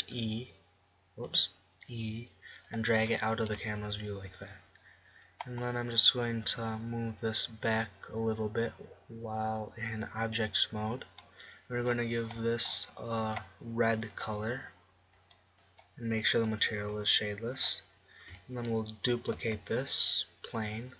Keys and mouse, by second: 0.5 e, 2.1 e, 3.5-5.5 drag, 4.5 Tab, 7.2 g, 7.6 click, 11.1-16.9 drag, 18.4-20.9 middle drag, 20.1 shift+d.